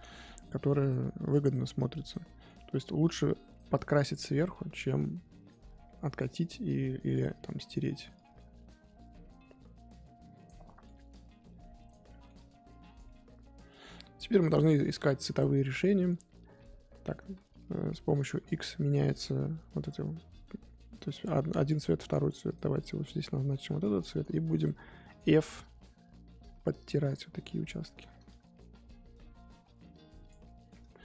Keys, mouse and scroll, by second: 0.2-2.2 drag, 2.2 middle click, 3.0 click, 3.8 middle click, 4.7-5.8 drag, 5.8 middle click, 6.6 click, 7.3 middle click, 8.1-10.5 drag, 10.5 middle click, 11.1 click, 12.0 middle click, 12.3 click, 13.0 middle click, 13.8 scroll up 1, 13.9-14.4 scroll down 1, 14.4-14.7 scroll up 2, 14.8-22.5 middle drag, 22.5 click, 23.3 middle click, 23.9-24.6 scroll up 2, 24.6 f, 25.3-28.0 drag, 28.0 ctrl+z, 28.3-30.4 drag, 30.4-31.0 middle drag.